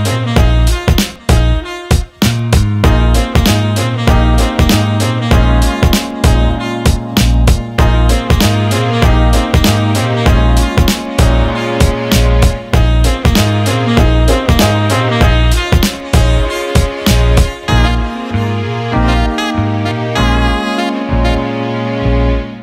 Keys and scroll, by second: 17.3 Escape.